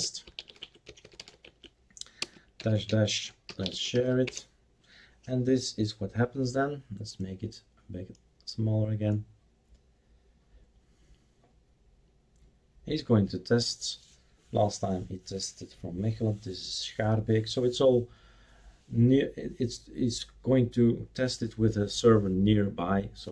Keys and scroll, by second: 0.0-5.8 typing.